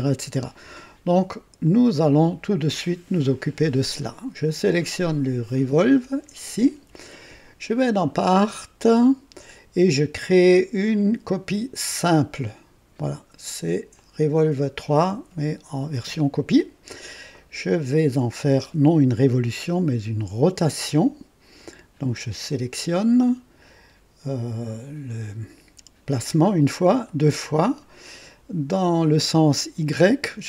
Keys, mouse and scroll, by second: 1.6 click, 9.4-11.8 drag, 12.0 click, 13.9 click, 21.5 click, 27.0 click.